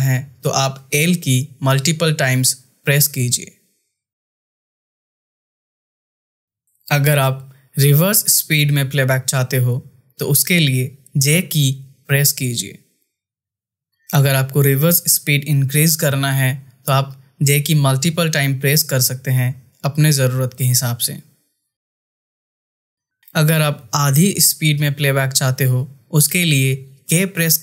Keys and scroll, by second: 0.6 l, 3.5 l, 5.0 space, 11.8 j, 15.3 j, 16.9 j.